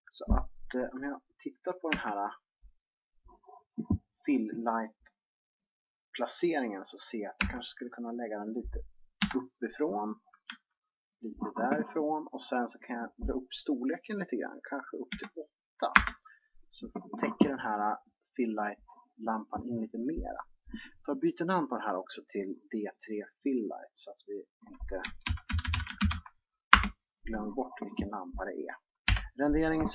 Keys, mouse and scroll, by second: 2.9 KP_3, 8.4 g, 10.2 KP_7, 11.4 g, 13.7-15.5 drag, 22.5-25.7 drag, 26.6 l.